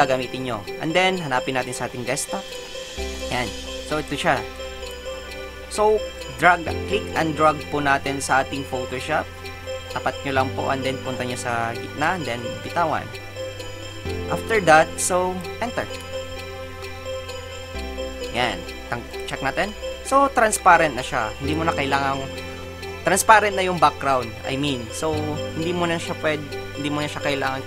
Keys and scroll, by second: 16.0 Return.